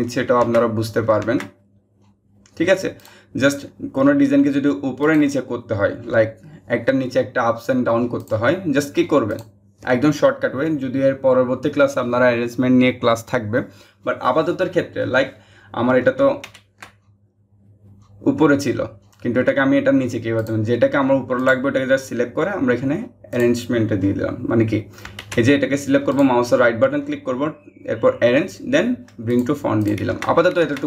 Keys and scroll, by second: 16.0 ctrl+z, 24.8 ctrl+z.